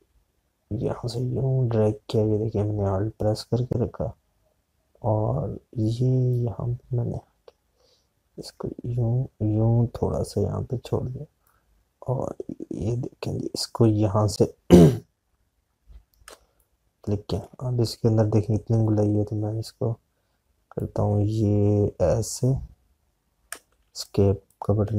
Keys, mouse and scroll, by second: 0.0 click, 7.2 click, 12.3 click, 17.1 space, 17.4 click, 17.6 space, 21.6 click, 24.4 space.